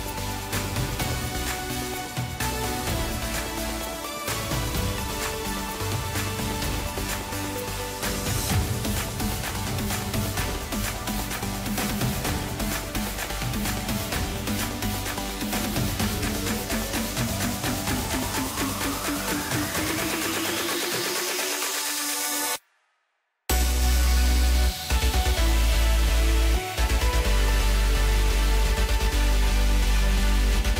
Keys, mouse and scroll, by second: 3.5 Tab, 3.9 scroll down 4, 4.1-4.7 middle drag, 4.7-5.0 scroll up 2, 5.0-6.1 middle drag, 6.1-8.1 scroll down 3, 8.1 scroll up 2, 8.3-9.1 scroll down 2, 9.1-9.5 ctrl+KP_2, 10.0 KP_0, 10.9-13.0 scroll down 2, 13.0 click, 14.7-17.7 drag, 19.1 click, 20.5 click, 21.8-22.6 drag, 22.6-23.0 scroll down 2, 23.8-26.6 drag, 26.6-27.3 scroll up 3, 27.3 click, 28.0-28.4 scroll up 3, 28.4 scroll down 3, 28.6-29.5 middle drag, 29.5-29.9 scroll up 3, 29.9 middle click, 30.6 scroll up 1.